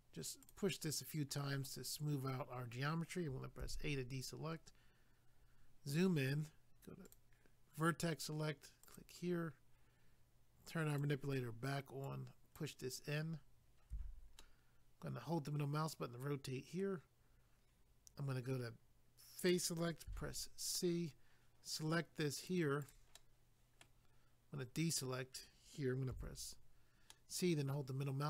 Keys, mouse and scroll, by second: 0.4 click, 0.5 click, 3.6 a, 5.3 scroll up 1, 7.0 click, 7.1 click, 8.8 click, 9.0 click, 10.9 click, 11.0 click, 12.1 click, 13.9 a, 14.4 middle click, 19.4 click, 19.5 click, 20.1 c, 20.7 click, 22.8 right click, 22.9 right click, 23.2 middle click, 27.1 middle click.